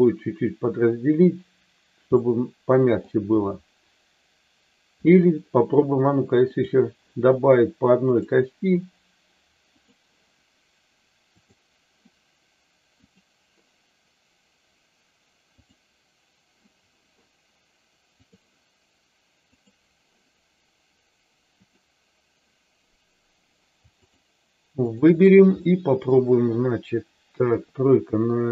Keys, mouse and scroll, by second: 2.2 middle click, 6.5 click, 8.0 click, 11.3 click, 15.5 click, 18.2 click, 21.7 click, 24.9 shift+click, 25.5 middle click, 27.4 KP_3.